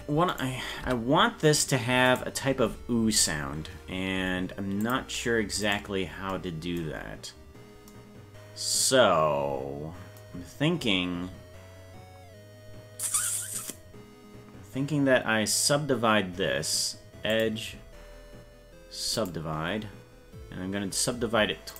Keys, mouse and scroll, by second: 0.3 right click, 0.9 Tab, 2.1 right click, 4.8 click, 5.6 right click, 7.1-7.4 scroll up 2, 17.3-19.3 drag.